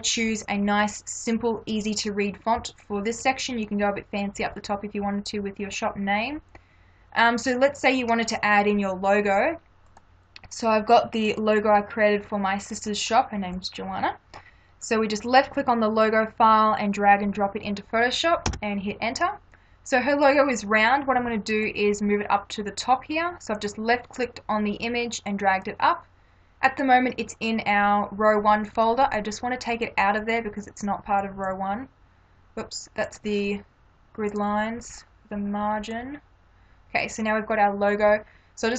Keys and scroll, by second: 14.5 space, 18.5 Return.